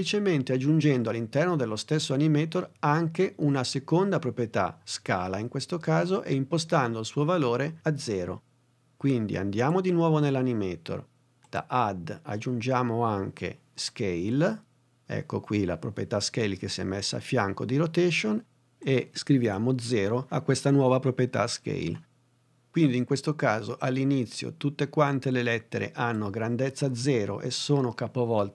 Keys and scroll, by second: 19.9 0, 20.4 Return.